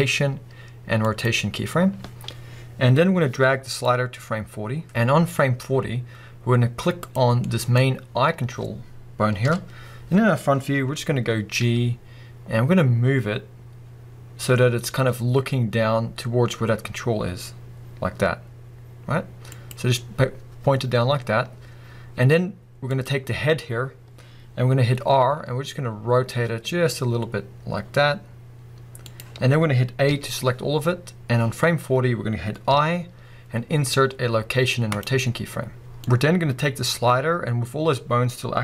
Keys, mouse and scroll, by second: 3.0 click, 3.8-7.2 drag, 5.0 scroll down 2, 5.2-7.0 scroll up 2, 7.4-19.6 middle drag, 9.4 KP_1, 11.6 g, 19.6 click, 22.9 click, 25.3 r, 29.2 click, 30.1 a, 32.6 i, 36.1-38.6 drag.